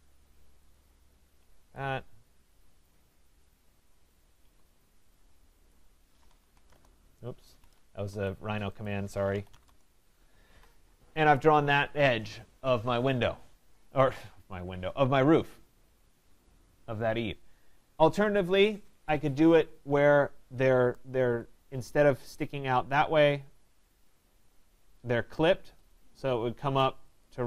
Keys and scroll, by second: 1.6 Escape, 6.7 Return, 7.6 Escape, 9.6 Return.